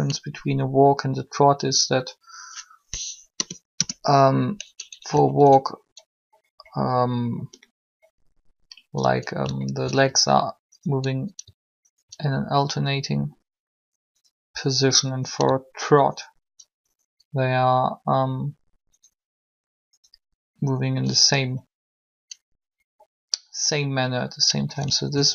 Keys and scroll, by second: 3.4 BackSpace, 3.4 Return.